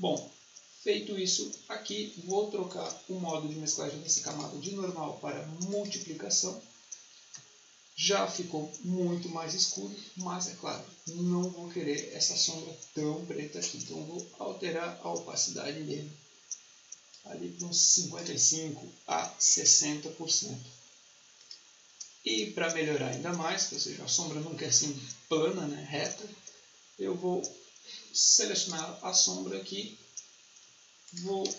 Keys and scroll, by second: 19.2-20.0 typing, 29.7 Escape, 31.3-31.5 typing.